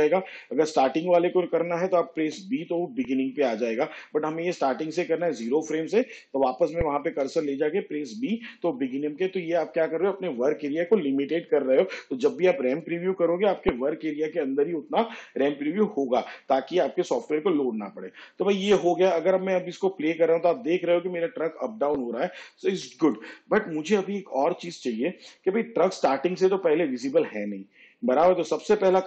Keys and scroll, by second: 1.1 n, 4.8 b, 9.7 b.